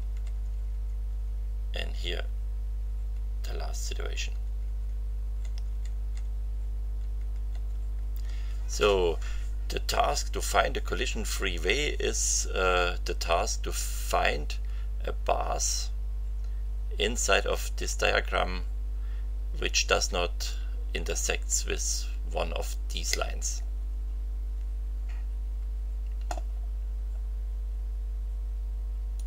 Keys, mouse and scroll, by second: 2.2 Right, 3.8 Right, 12.0 scroll down 2, 23.7-24.0 scroll down 2, 29.1 click.